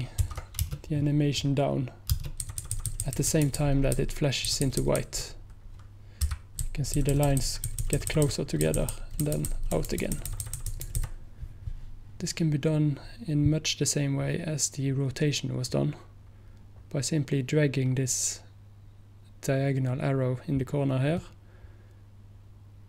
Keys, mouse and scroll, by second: 0.3 ctrl+z, 2.5 Right, 2.5 space, 2.6 Right, 2.8 Right, 6.3 p, 6.6 Left, 7.0 Left, 7.2 Left, 7.3 Left, 7.5 Left, 21.2-22.8 drag.